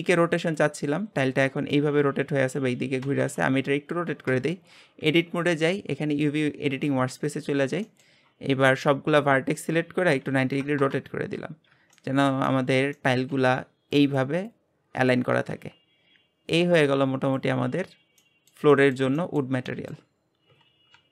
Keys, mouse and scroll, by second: 4.3 Tab, 6.8 click, 8.8 a, 10.0 r, 11.7 Tab, 11.9-17.3 middle drag, 17.3 click, 18.2-20.0 middle drag, 20.0-21.0 scroll up 2.